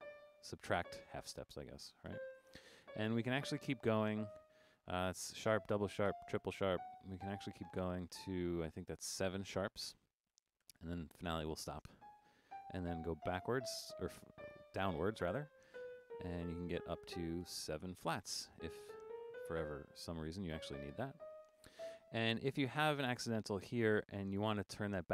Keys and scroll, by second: 2.8-4.2 typing, 5.4-7.6 typing, 10.0-10.3 typing, 12.5-17.1 typing, 18.8-19.5 typing, 20.5-21.7 typing.